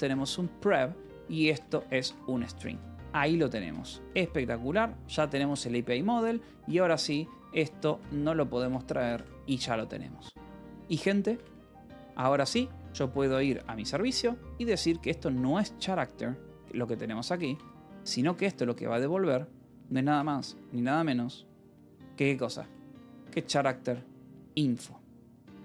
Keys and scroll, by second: 0.0-4.0 typing, 5.3 j, 5.4 Return, 6.5 a, 6.8 Escape, 7.1 h, 7.5 space, 7.7 c, 8.5 Return, 9.5 ctrl+s, 11.2-12.7 typing, 13.1 ctrl+p, 13.5 Return, 15.3 j, 15.8 l, 16.9-20.5 typing, 19.4 Escape, 22.4-24.4 typing, 24.6 Return, 25.3 Escape.